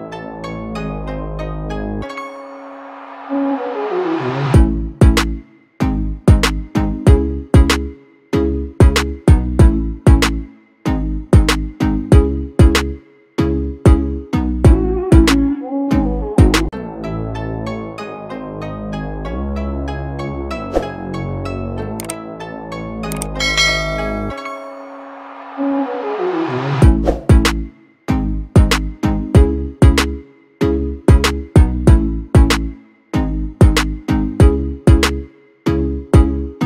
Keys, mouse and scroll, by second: 22.6 BackSpace, 22.7 BackSpace, 23.2 8, 26.0 Tab, 26.2 Tab, 30.2 8, 35.2 BackSpace.